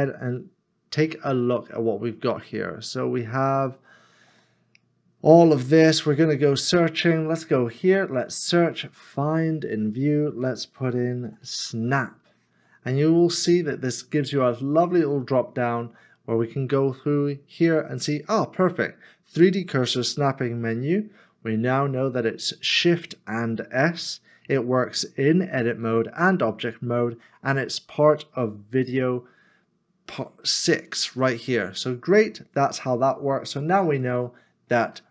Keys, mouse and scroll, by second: 0.4 scroll up 1, 1.3 scroll down 1, 11.0 s, 11.2 n, 11.6 a.